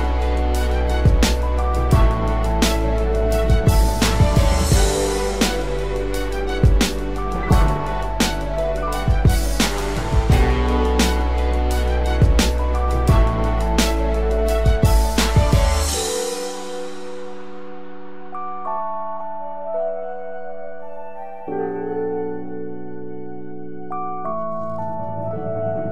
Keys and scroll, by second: 17.4 ctrl+-, 22.3 ctrl+0.